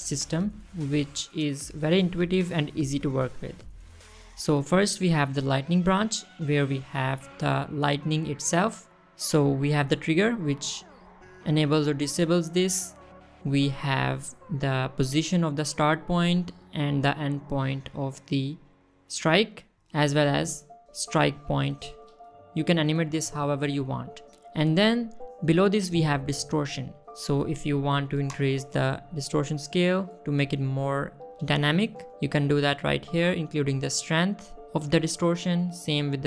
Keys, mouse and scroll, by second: 6.9 click, 10.2 click, 11.2 click, 11.9 click, 12.7 click, 13.1 middle drag, 13.5-13.9 scroll down 2, 14.6 click, 15.6-17.0 drag, 17.6 click, 18.8-19.8 drag, 20.5 click, 21.1 click, 22.2-22.6 drag, 23.1-24.1 drag, 24.6 middle click, 24.8 scroll up 1, 25.2 middle drag, 25.5 scroll up 1, 29.0-33.4 shift+drag, 33.2 shift+middle click, 33.8 middle click, 34.8-35.9 shift+drag.